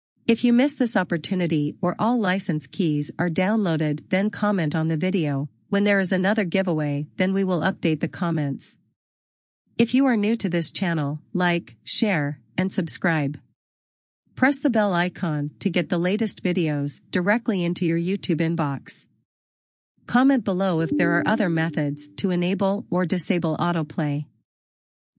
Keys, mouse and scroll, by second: 5.5 click, 9.6 click.